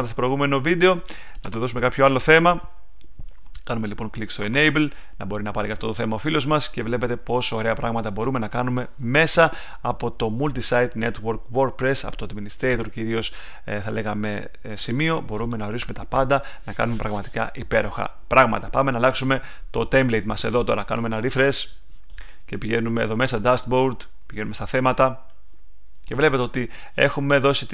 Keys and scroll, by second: 18.3 super+Tab.